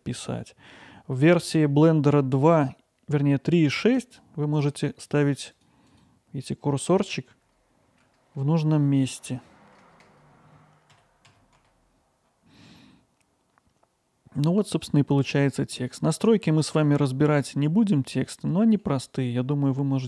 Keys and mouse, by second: 4.0 click, 5.1 click, 5.5 click, 5.9 click, 7.4 BackSpace, 7.9 Right, 8.3 BackSpace, 9.1 Right, 9.7 BackSpace, 9.9 BackSpace, 11.0 a, 11.3 x, 11.6 i, 18.8 middle click.